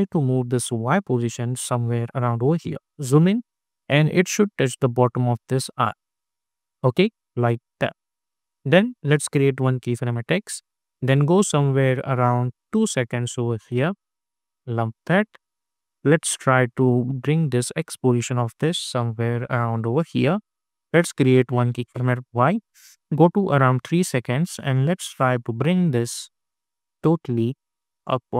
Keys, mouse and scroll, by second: 2.7 alt+scroll up 1, 3.6-6.1 drag, 6.1-6.6 scroll down 1, 7.0-7.6 scroll up 1, 7.6 space, 9.9-13.6 drag, 11.1-13.2 drag, 13.6-14.1 scroll down 2, 14.1 space, 14.6 click, 14.6 space, 15.0-16.5 scroll down 2, 16.8-26.5 drag, 26.8 click, 28.2 click.